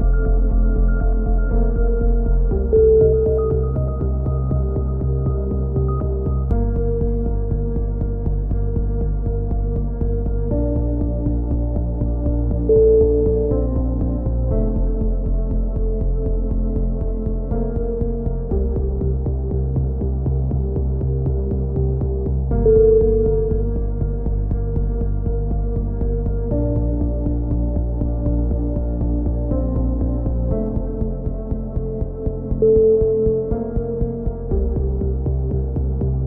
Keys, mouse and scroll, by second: 0.3 e, 1.0 click, 2.6 e, 3.3 click, 4.4 s, 6.0 click, 6.7 z, 7.2 click, 8.6 click, 9.2 z, 9.5 a, 10.3 click, 10.9 x, 11.3 right click, 11.4 z, 12.2 Tab, 13.3 click, 16.8 click, 17.6 middle click, 18.4 middle click, 18.8-19.8 drag, 20.9 Tab, 22.2-23.9 right drag, 23.2 z, 24.7 v, 25.6-27.1 drag, 28.4-30.1 drag, 30.8 a, 30.9-32.6 drag, 32.3 ctrl+z, 32.9 click, 33.6 a, 34.3-35.6 drag, 35.1 x, 36.0-36.2 drag.